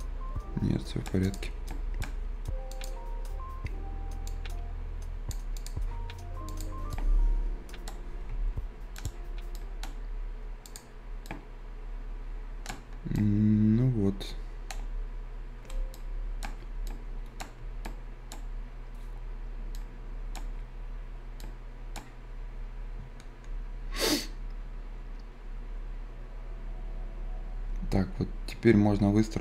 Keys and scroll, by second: 9.0 Escape.